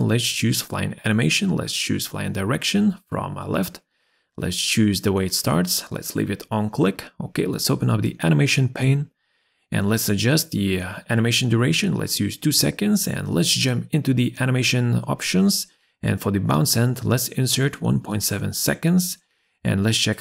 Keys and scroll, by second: 10.9 2, 11.0 Return, 19.0 Return.